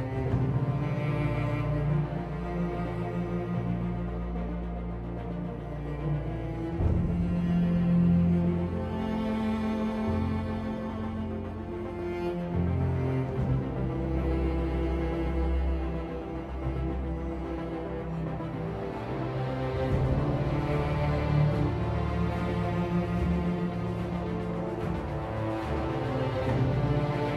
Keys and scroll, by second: 3.6 Delete.